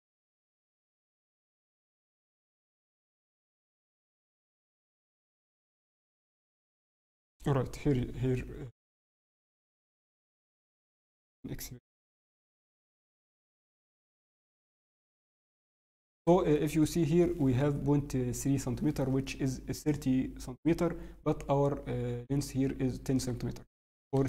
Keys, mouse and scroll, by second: 10.3 scroll, 14.3 scroll, 15.1 scroll, 15.8 scroll down 4, 16.7 scroll up 5, 16.9 scroll, 18.7-19.5 scroll, 19.9 scroll up 2, 21.3 scroll, 23.4 scroll.